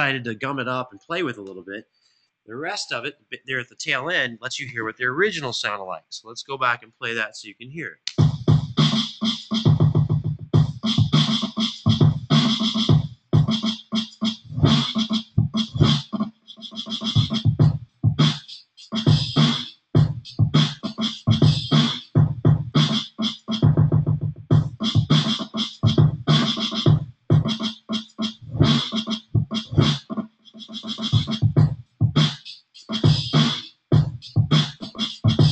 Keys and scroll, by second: 7.8 space.